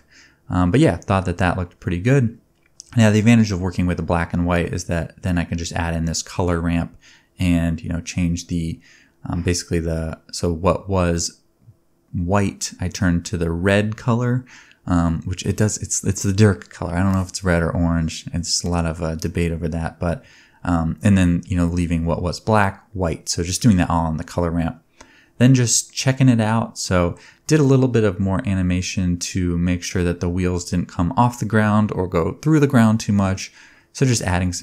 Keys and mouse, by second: 2.4 click, 4.9 click, 7.5-13.0 drag, 8.4 space, 8.8 space, 9.0 space, 9.3 space, 13.0-19.9 shift+middle drag, 19.9-20.8 shift+drag, 20.8 middle click, 21.0-22.5 drag, 21.5 ctrl+Tab, 22.5-25.8 middle drag, 22.5 g, 24.1 g, 25.8-27.5 drag, 26.5-27.5 middle drag, 26.5-27.5 right drag, 27.7 g, 28.6-29.7 drag, 32.0-34.6 drag, 33.8-34.6 middle drag, 33.8-34.6 right drag, 34.2 g.